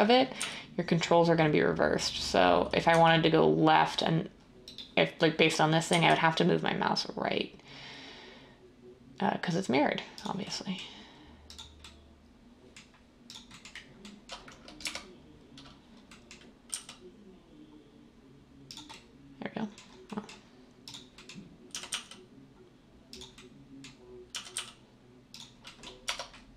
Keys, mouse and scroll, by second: 0.4 g, 2.9 g, 5.9 g, 14.8 1, 16.7 g, 21.7 g, 24.3 g, 24.5 g, 26.0 Tab.